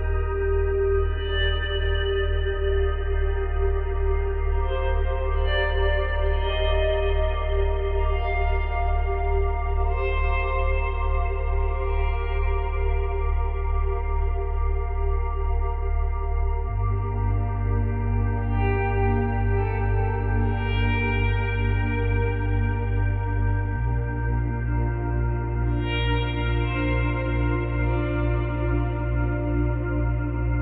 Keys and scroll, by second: 0.8 space, 3.2 ctrl+z, 8.4 Delete, 9.8 space, 11.0 space.